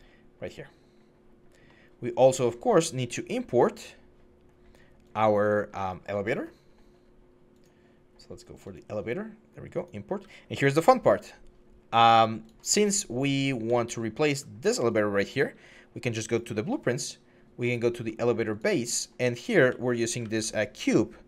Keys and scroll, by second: 13.5-14.0 typing, 19.4-20.1 typing.